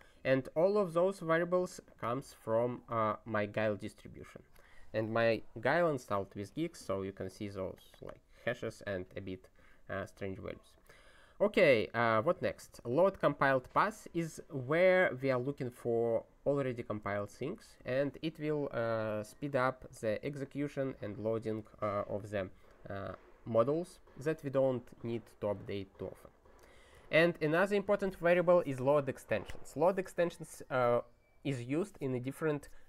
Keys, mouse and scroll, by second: 11.2 click, 12.2 ctrl+p, 12.4 ctrl+e, 20.0 click, 21.4 ctrl+g, 26.4 ctrl+n, 26.7 ctrl+e.